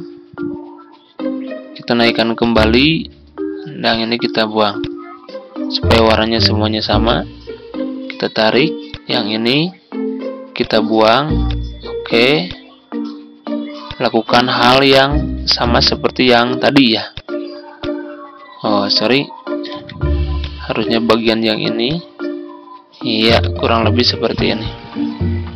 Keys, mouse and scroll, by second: 7.4-13.3 drag, 19.5 ctrl+z, 20.2-25.5 drag.